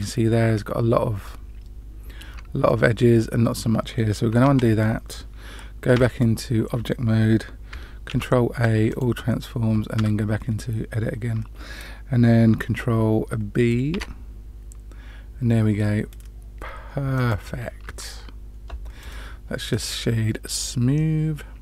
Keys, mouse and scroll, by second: 2.6 middle click, 4.4 ctrl+z, 5.9 Tab, 8.0 ctrl+a, 9.9 Tab, 13.9 ctrl+b, 17.8 Tab, 19.0 right click, 20.5-21.6 middle drag.